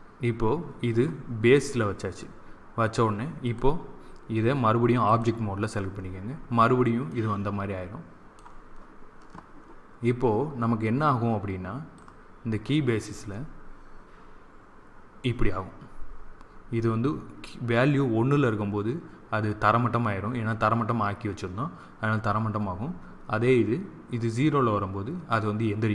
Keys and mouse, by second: 3.3 click, 4.2 typing, 4.7 click, 7.0-8.8 middle drag, 11.9-13.7 drag.